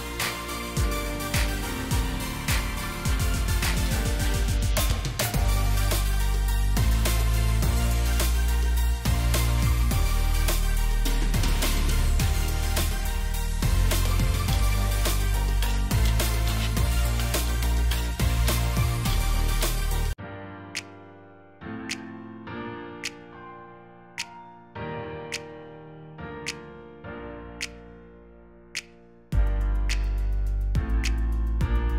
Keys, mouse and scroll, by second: 0.7 shift+click, 3.3 alt+click, 6.2 ctrl+d, 9.7 shift+click, 14.3 ctrl+g, 15.1 alt+scroll down 1, 15.6-15.9 scroll down 1, 18.7 alt+click, 20.3 shift+click, 26.6 shift+click, 28.9 double click, 31.0 Delete, 31.6 right click.